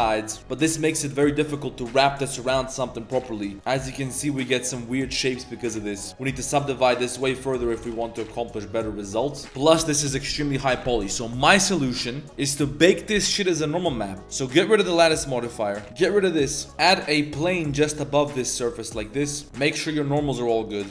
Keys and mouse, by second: 3.5-5.6 drag, 6.0 drag, 6.4 s, 7.3 click, 7.7 shift+d, 7.8 g, 9.4 z, 9.4 Tab, 13.1 click, 15.5 click, 16.0 x, 16.4 click, 16.6 click, 16.7 Tab, 16.7 ctrl+s, 16.7 shift+a, 17.3 drag, 18.0 g, 19.4 Tab, 19.4-20.9 drag.